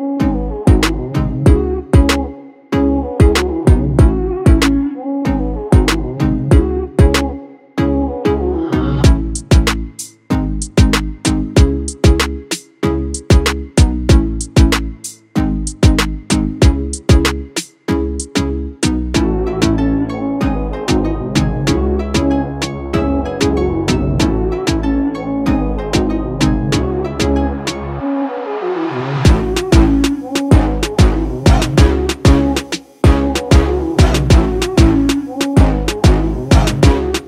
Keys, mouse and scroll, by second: 1.4 space, 1.6 click, 2.5 space, 2.6 click, 3.0 space, 3.8-14.9 drag, 14.9 ctrl+d, 16.4-19.6 drag, 19.6 click, 22.0 space, 22.3 click, 22.9-24.1 scroll down 1, 24.1-25.6 drag, 25.9 space, 26.5-28.5 ctrl+drag, 28.5-30.1 ctrl+drag, 30.1-30.6 alt+scroll down 1, 30.6 space, 30.8 click, 31.1 space, 31.8 click, 33.1 click, 34.7-36.2 typing.